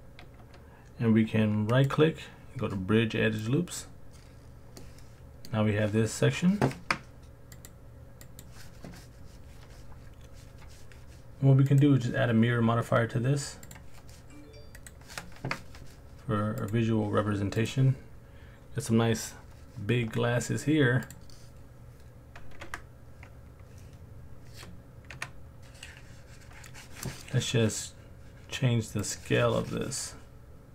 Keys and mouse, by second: 1.7-3.8 drag, 4.8 middle click, 7.6-8.4 drag, 11.7-13.7 drag, 14.7 click, 21.1 click, 22.6 Tab, 25.1 KP_1, 29.1 click.